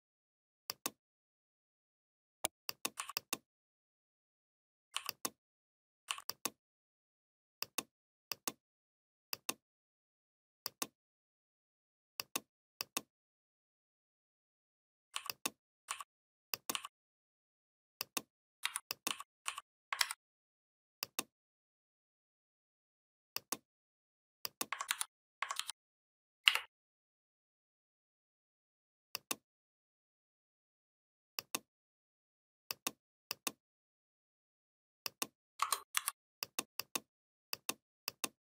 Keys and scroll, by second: 18.5 v, 19.8 ctrl+a, 24.7 ctrl+c, 25.4 ctrl+f, 26.3 Up, 35.8 shift+m.